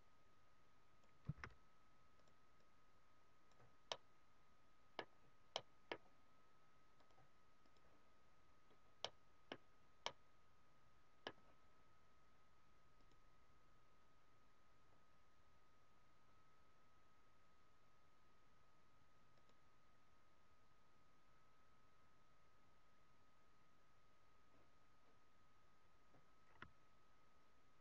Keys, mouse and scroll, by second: 2.3 click, 3.9 middle click, 5.1 scroll down 2, 5.5 middle click, 5.7-6.1 scroll down 3, 7.8 click, 8.3 scroll down 2, 9.0 middle click, 9.4-9.8 scroll down 2, 9.9 middle click, 13.0 click, 19.4 click.